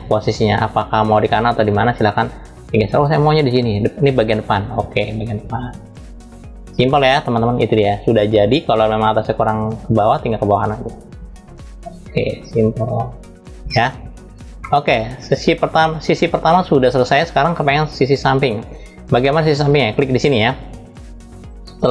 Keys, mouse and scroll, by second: 8.9 click, 14.3-15.5 middle drag, 16.4-16.8 scroll down 3, 19.0 middle click, 21.0 click.